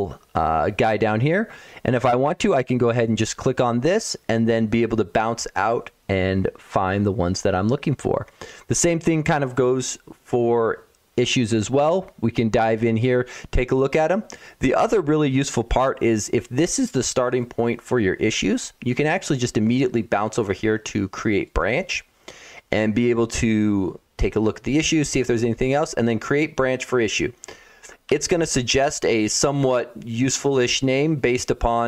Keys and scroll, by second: 27.9 Home.